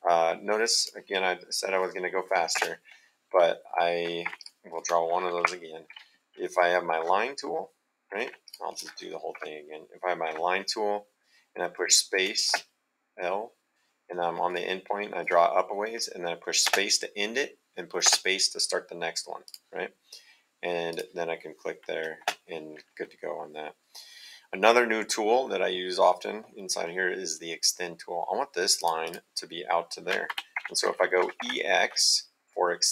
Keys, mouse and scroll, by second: 0.8 click, 2.5 space, 4.2 Escape, 4.4 click, 5.3 Delete, 8.1 Escape, 8.4 click, 9.3 Delete, 12.5 space, 14.4 click, 16.6 space, 18.0 space, 19.4 click, 20.9 click, 22.2 space, 26.5 middle click, 28.7 click, 30.2 Escape, 31.2 e, 31.4 x.